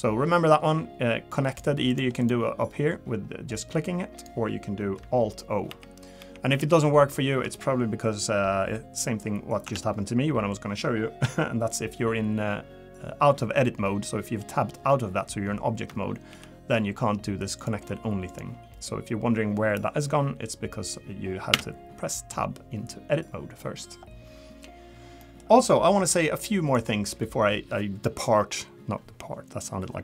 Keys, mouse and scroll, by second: 1.5 click, 1.9 click, 2.2 click, 5.7 alt+o, 6.2 alt+o, 6.6 alt+o, 9.6 Tab, 16.3 alt+o, 17.6 click, 21.5 Tab, 23.6 middle click, 25.2 middle click.